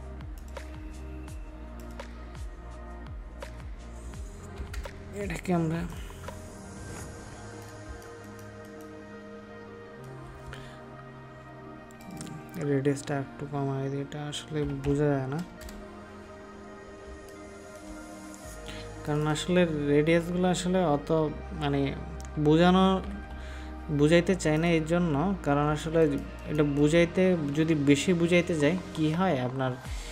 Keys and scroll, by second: 7.9 ctrl+space, 17.0 ctrl+space, 25.7 ctrl+space.